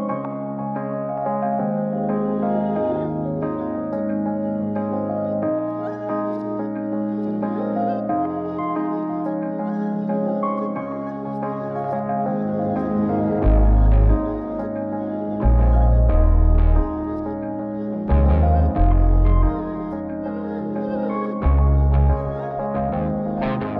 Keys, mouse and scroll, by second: 1.0 click, 2.2-4.1 drag, 6.4 x, 7.0 shift+a, 8.3 s, 10.2 click, 11.0 x, 12.7 click, 13.0 g, 14.5 n, 14.9 n, 15.5 KP_0, 16.4 g, 17.8 r, 19.4 g.